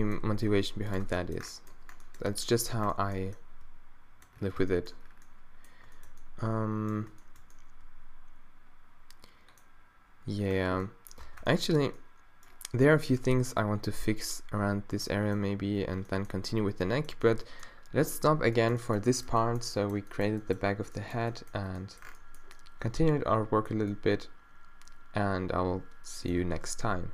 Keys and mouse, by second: 0.2 g, 1.1 Tab, 4.6 Tab, 11.3 Tab.